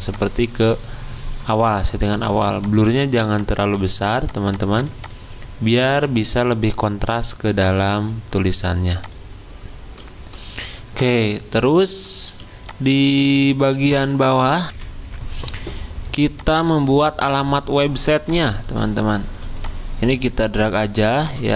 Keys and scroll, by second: 14.7 ctrl+c, 14.7 F10.